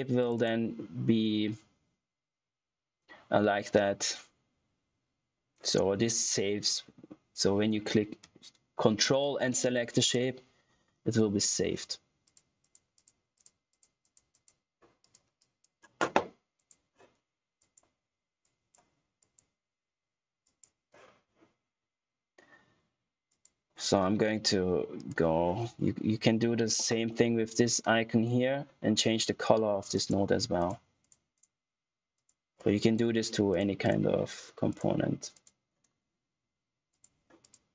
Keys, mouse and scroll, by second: 8.3 ctrl+Num_Lock, 8.3 typing, 9.9 click, 11.6 typing, 12.6 typing, 17.5 ctrl+click, 23.2 click, 29.2 ctrl+Num_Lock, 29.8 click, 34.5 typing, 36.5 typing.